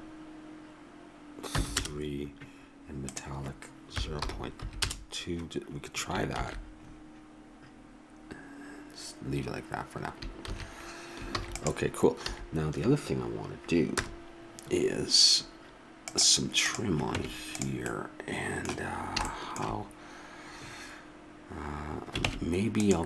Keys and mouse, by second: 6.6 shift+z, 10.7 shift+z, 11.3 ctrl+s, 12.3 a, 13.9 KP_0, 17.1 Tab, 18.0-19.0 middle drag, 22.3 ctrl+Tab.